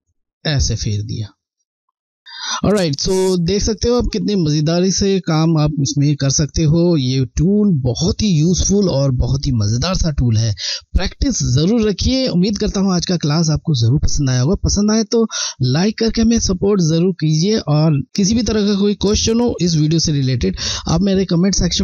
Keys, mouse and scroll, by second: 1.4 alt+scroll down 1, 2.0 alt+scroll down 1.